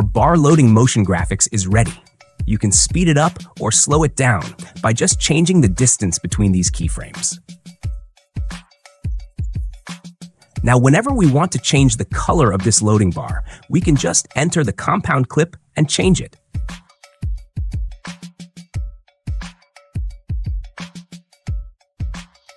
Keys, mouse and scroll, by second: 0.3 click, 1.2 space, 3.1 space, 4.3 click, 5.8 click, 7.9 click, 8.3 space, 10.5 space, 13.3 click, 16.0 click, 18.7 click, 21.1-22.1 drag.